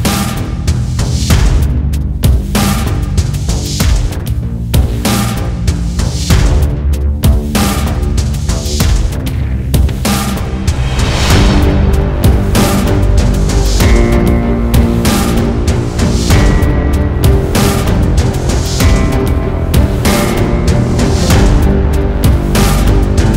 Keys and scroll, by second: 9.0 ctrl+z, 9.5 ctrl+z, 10.0 ctrl+z, 10.4 ctrl+z, 11.0 ctrl+z, 15.1 scroll, 17.5 scroll.